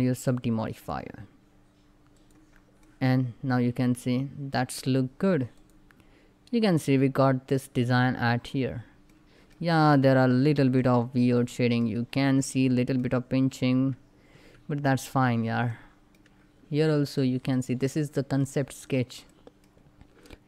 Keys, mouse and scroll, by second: 2.5-5.2 middle drag, 5.2 click, 8.2 scroll up 1, 8.8 middle click, 9.7 scroll up 1, 10.4-13.4 middle drag, 13.4 Tab, 14.5 click, 14.9 Tab, 15.4 middle click, 16.3 scroll up 1, 16.8-18.4 middle drag, 18.4 scroll down 1, 18.9 middle click, 19.3 scroll up 1.